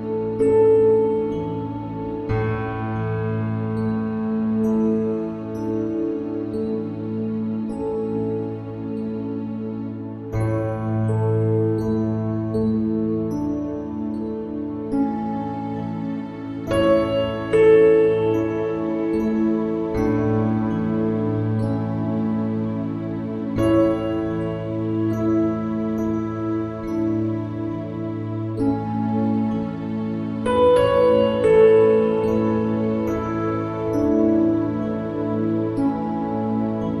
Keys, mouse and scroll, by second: 0.5 middle click, 1.1 shift+z, 1.9 shift+z, 2.3 Tab, 2.8-3.9 drag, 6.3 click, 6.7 shift+z, 8.0 shift+z, 8.9 click, 10.3 click, 11.8 Tab, 12.5 click, 12.9 ctrl+KP_Add, 14.1-15.9 drag, 16.5 click, 17.2 click, 18.2 click, 18.9-19.9 drag, 20.4 click, 21.7 click, 23.2 a, 23.5 click, 24.7 ctrl+i, 25.1-27.3 drag, 28.7 shift+z, 30.2 middle click, 31.3 shift+z, 32.5 ctrl+r, 34.1 right click, 34.5 Tab, 34.9 Tab, 35.5 shift+z, 36.0 middle click.